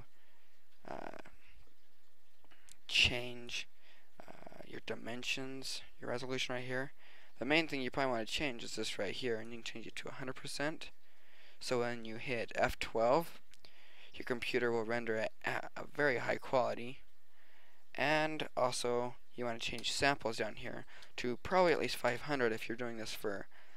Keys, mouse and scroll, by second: 2.4-3.5 middle drag, 3.5-5.0 drag, 5.5 click, 8.7 click, 17.5-18.8 middle drag, 20.1-21.6 drag, 21.9 KP_0.